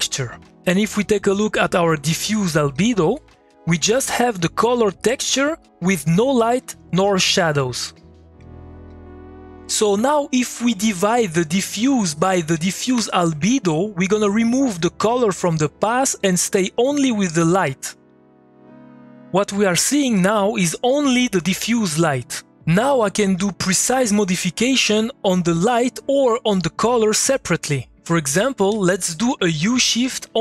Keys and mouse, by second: 2.3 click, 2.8 3, 6.3-9.3 typing, 12.0 click, 12.9 m, 13.6 click, 14.8-28.3 ctrl+drag, 28.3 middle click, 28.7 click, 29.2 Tab, 29.5-30.4 typing.